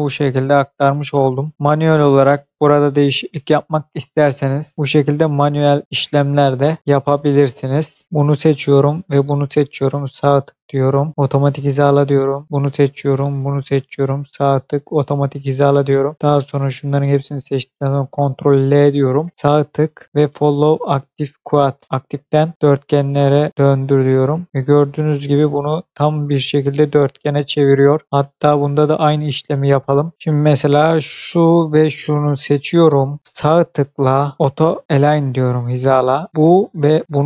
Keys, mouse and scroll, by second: 0.7 scroll up 1, 1.7 middle click, 5.8 scroll down 1, 8.0 click, 9.0 shift+click, 10.2 right click, 11.1 click, 12.4 click, 13.2 shift+click, 14.7 click, 16.1 shift+click, 18.2 ctrl+l, 19.3 right click, 22.5 click, 24.2 scroll down 1, 25.8 click, 27.5 scroll up 1, 28.2 middle click, 29.5 scroll up 1, 31.1 click.